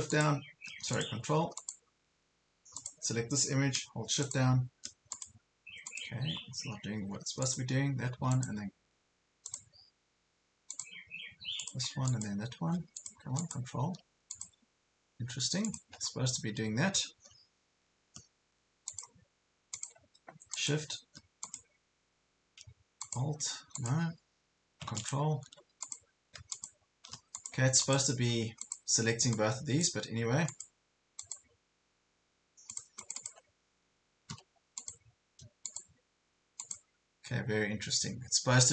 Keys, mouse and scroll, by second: 2.9 click, 6.5 scroll down 1, 7.4 click, 16.3 ctrl+scroll down 1, 17.0 ctrl+scroll up 1, 17.5 scroll up 1, 18.2 ctrl+scroll up 1, 18.9 click, 23.9 click, 28.7-34.0 drag, 34.0 Escape, 34.8 click.